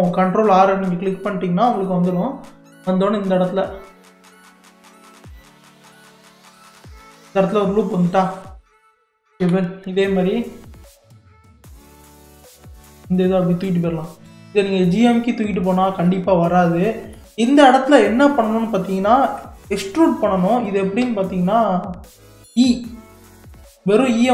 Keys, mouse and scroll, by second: 6.6 click, 7.3-9.4 middle drag, 9.4 KP_3, 10.1 scroll up 3, 10.7-11.3 scroll down 1, 11.3-12.4 shift+middle drag, 12.4 click, 14.3 g, 16.6 scroll down 1, 17.2-20.3 shift+middle drag, 21.0 e.